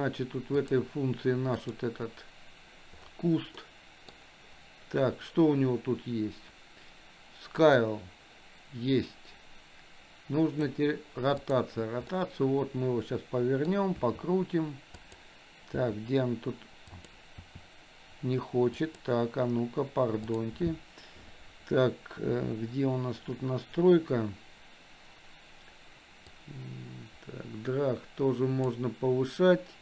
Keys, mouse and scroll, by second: 0.6 click, 3.7 middle click, 7.7-10.7 drag, 11.5 click, 12.1-13.7 middle drag, 14.0 r, 15.8 r, 17.4 r, 20.3 click, 26.3-28.7 drag.